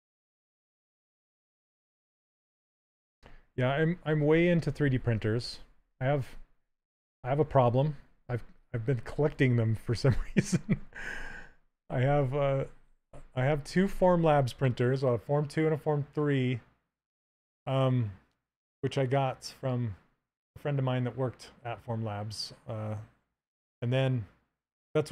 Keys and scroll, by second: 1.6 s.